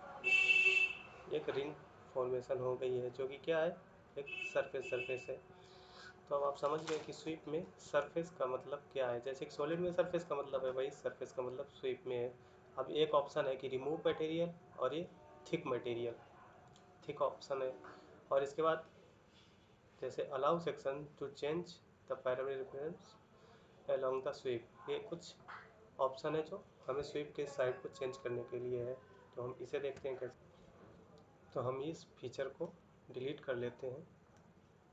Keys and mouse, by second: 1.6 middle click, 3.7 middle click.